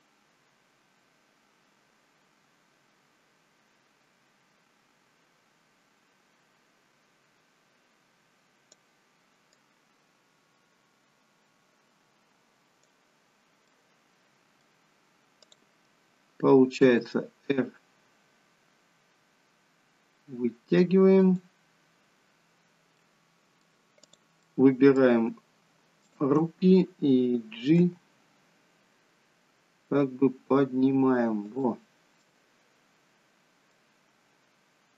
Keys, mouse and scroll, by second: 9.7 click, 13.8 middle click, 15.4 click, 16.8 r, 23.1 middle click, 24.1 click, 24.7 middle click, 26.0 shift+click, 27.8 g, 32.3 middle click.